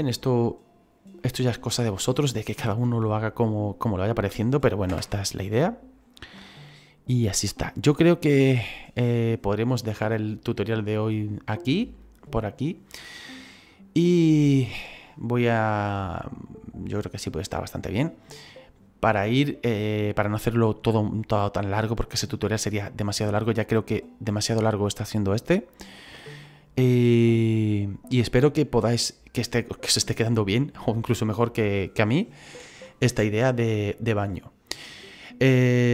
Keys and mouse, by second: 1.1 middle click, 4.8 KP_0, 7.4 click, 10.7 right click.